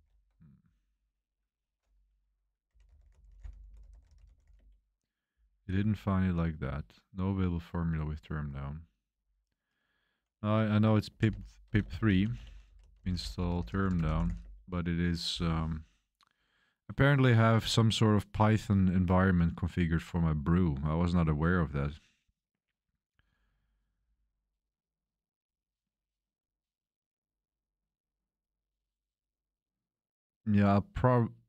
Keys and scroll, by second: 0.0 super+3, 2.4-5.7 typing, 10.8-14.9 typing, 16.1-16.9 typing.